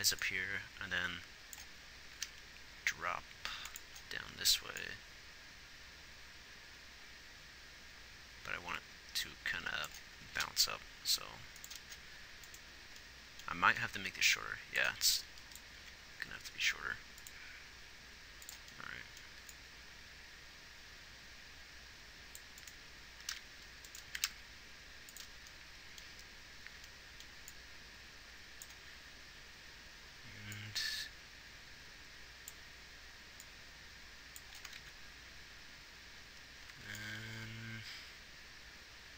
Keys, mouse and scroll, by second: 10.3 g, 15.2 click, 15.9 s, 17.4 g, 19.5 a, 21.5 click, 23.4 g, 24.2 g, 35.0 ctrl+z, 36.6 a.